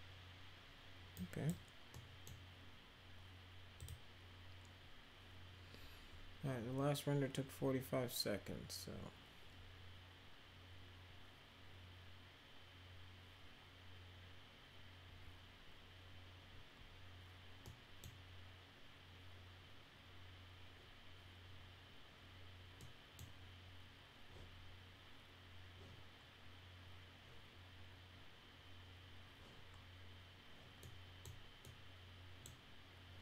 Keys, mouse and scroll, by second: 1.1-1.4 right drag, 1.9-2.2 middle drag, 3.7 click, 17.6 middle click, 22.7 middle click, 30.8 middle click, 31.6-32.4 middle drag.